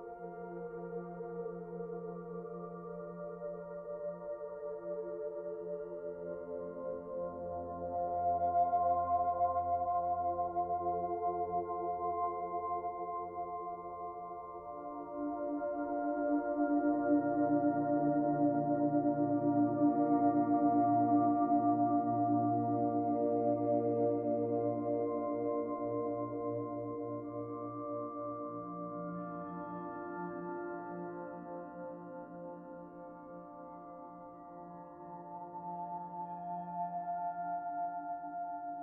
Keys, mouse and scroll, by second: 1.3-2.3 scroll down 2, 1.6 middle click, 2.3 Tab, 2.6 middle click, 4.2 click, 12.7-14.1 scroll up 1, 14.1 middle click, 19.3 Tab, 20.6 middle click, 22.8 click, 23.3 click, 29.4 click, 31.7 click, 35.1 click, 36.4 middle click, 37.3 click, 38.3 middle click.